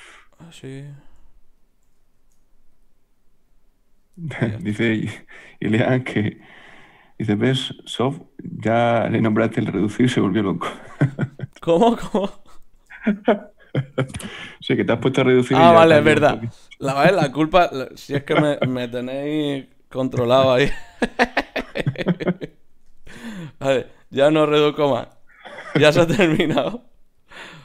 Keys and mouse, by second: 2.1 shift+q, 4.1-5.3 middle drag, 5.6-6.9 middle drag, 5.7-9.4 right drag, 9.4 shift+q, 10.9-12.6 drag, 12.6-17.2 middle drag, 17.2-18.3 drag, 18.3 right click, 18.7-21.4 drag, 19.5 g, 20.6 g, 21.4 right click, 21.7-23.4 drag, 23.9 Tab, 24.3-26.0 drag, 24.8 Tab, 26.2 ctrl+z, 26.5 ctrl+z.